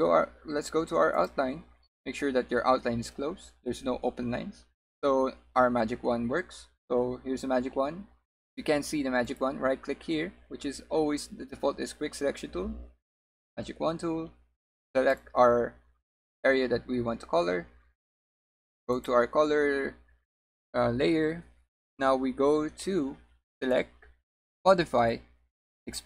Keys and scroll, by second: 2.3 w.